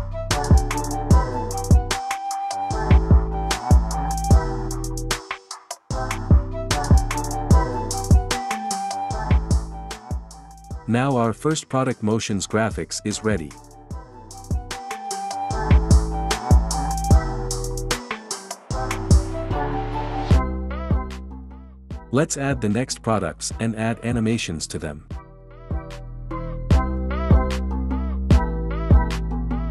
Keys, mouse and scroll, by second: 1.7 click, 3.9 click, 7.0 click, 9.8 click, 13.2 space, 22.3 click, 28.1 click.